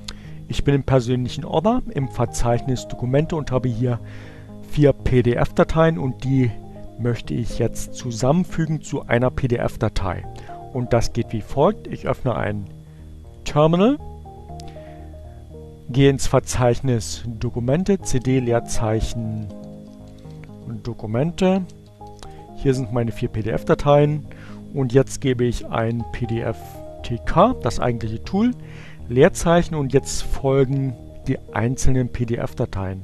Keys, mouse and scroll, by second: 15.4 click, 16.2-17.0 typing, 18.5-22.2 typing, 23.6-26.4 typing, 31.6 1, 31.9 p.